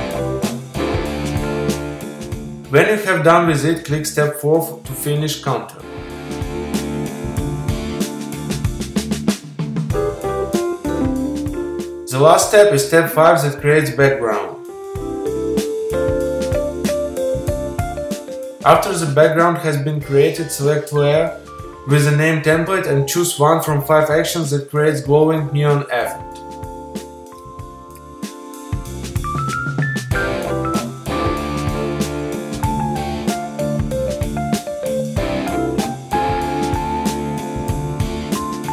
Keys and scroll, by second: 37.4 super+i.